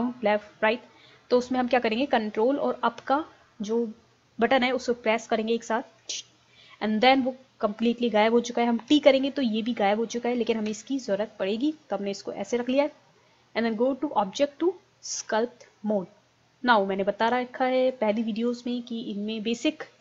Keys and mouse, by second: 6.1 ctrl+Up, 10.7 t, 14.9 click, 17.9-19.8 drag.